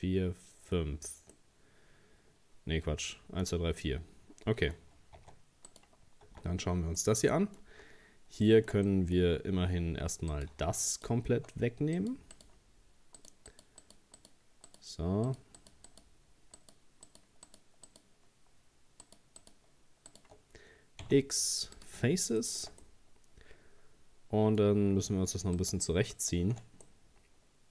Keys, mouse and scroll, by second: 1.3-5.2 middle drag, 5.2 Tab, 5.7 right click, 6.3 Tab, 7.0 middle click, 7.8 scroll down 2, 8.5 shift+middle click, 9.3-9.7 scroll up 1, 10.3 right click, 10.9 alt+shift+right click, 12.0 shift+right click, 12.4 shift+right click, 13.2 shift+right click, 13.5 shift+right click, 13.8 shift+right click, 14.2 shift+right click, 14.7 shift+right click, 15.3 shift+right click, 15.6 shift+right click, 15.9 shift+right click, 16.6 shift+right click, 17.1 shift+right click, 17.5 shift+right click, 17.9 shift+right click, 19.0 shift+right click, 19.4 shift+right click, 20.1 shift+right click, 21.0 x, 22.4 shift+middle click, 22.8-25.4 scroll up 1, 25.6 right click, 26.1 alt+shift+right click, 26.9-27.7 middle drag.